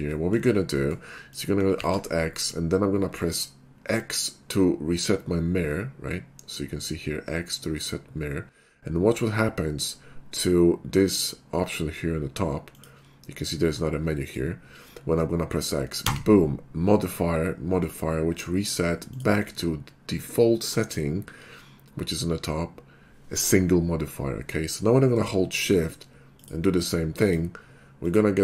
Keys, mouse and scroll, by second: 0.1 scroll down 1, 0.2 middle drag, 1.3 click, 1.9 alt+x, 12.8 click, 14.3 click, 16.1 x, 19.2 click, 25.8 shift+2, 26.4 shift+click, 27.3 shift+click, 28.0 shift+click.